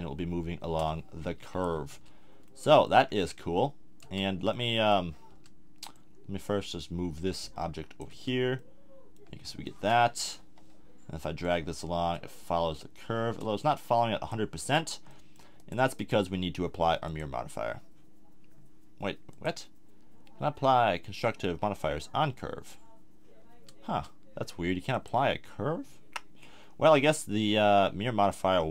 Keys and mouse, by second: 1.9 Tab, 2.9 a, 4.0 Tab, 5.3 Tab, 5.9 middle click, 8.1 Tab, 8.8-9.2 middle drag, 10.4 KP_1, 14.6-15.1 drag, 15.1-17.0 middle drag, 17.0-23.5 drag, 17.0-18.5 right drag, 23.5 Tab, 23.9 Tab.